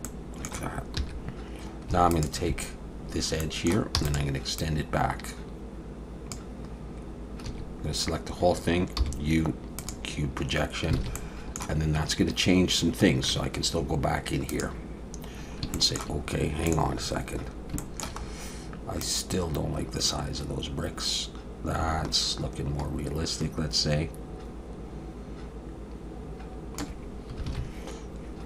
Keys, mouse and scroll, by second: 0.0 middle click, 1.0 2, 1.1-1.4 scroll up 2, 2.1 alt+shift+click, 3.1-3.4 scroll down 2, 3.4 middle click, 4.0 e, 4.6 click, 7.5 a, 9.0 u, 11.0 alt+a, 11.2 middle click, 12.1-12.4 scroll up 1, 12.6 scroll down 1, 13.3 Tab.